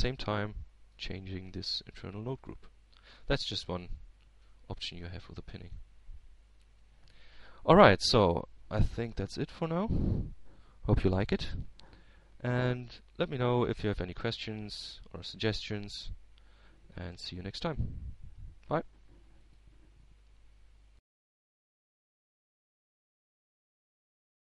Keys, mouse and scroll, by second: 0.5-2.0 middle drag, 0.5-2.0 right drag, 2.1-3.3 right drag, 3.5-5.4 drag, 5.4-5.8 scroll up 1, 6.0-7.2 middle drag, 7.5-8.6 drag, 8.7 middle click, 9.7-10.2 scroll up 1, 10.2-10.7 scroll down 1, 19.6-21.0 drag, 23.2 click.